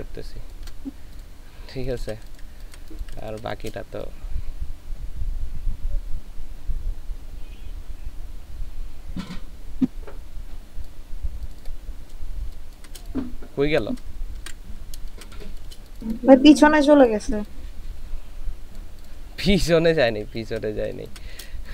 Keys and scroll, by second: 1.7 ctrl+space, 12.5 ctrl+space, 14.4 ctrl+z, 15.1 ctrl+space, 19.2 ctrl+space.